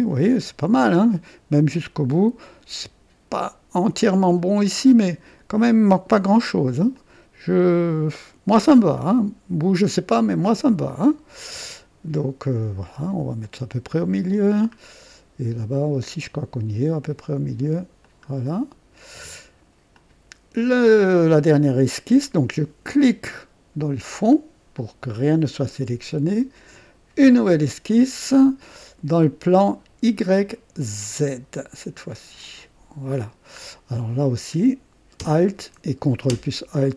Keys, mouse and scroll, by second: 4.3 scroll up 1, 4.9 right click, 5.1 typing, 6.9-11.5 drag, 13.4-14.6 drag, 14.7 scroll down 1, 15.6 scroll down 2, 16.1 right click, 18.0-19.3 drag, 19.9 click, 22.9 click, 26.7 click, 31.1 click, 32.4 click, 33.6-34.1 scroll up 4, 36.3 ctrl+alt+<, 36.7 ctrl+alt+click.